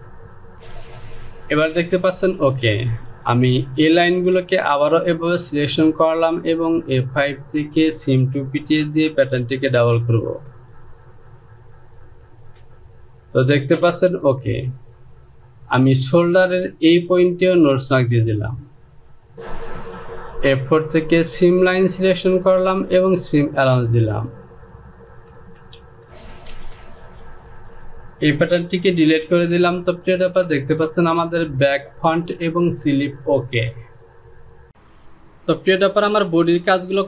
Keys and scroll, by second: 25.8 Down, 26.0 Return, 27.2 j, 29.4 shift+z, 30.0 shift+z.